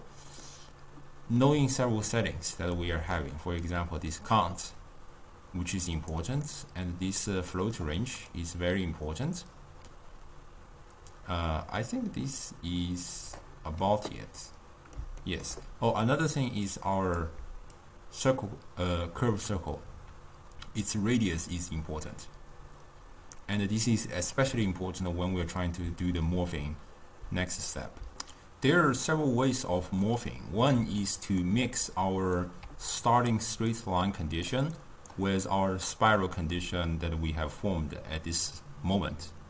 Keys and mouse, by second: 2.9 click, 3.8-6.6 drag, 6.6-7.7 middle drag, 7.7 click, 8.4-11.4 drag, 14.5-16.8 middle drag, 16.8 click, 17.9-20.9 shift+drag, 30.1-33.0 middle drag, 33.0 d, 33.1 click, 33.3-33.7 d, 33.8 click, 34.6 d, 34.8 click, 35.1-36.8 d.